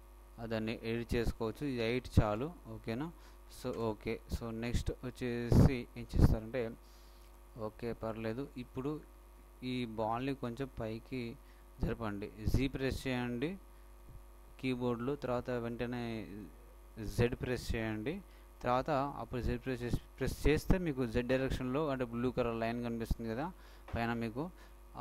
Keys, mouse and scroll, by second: 0.0-1.8 drag, 2.3 Return, 7.1-9.8 shift+middle drag, 10.3 g.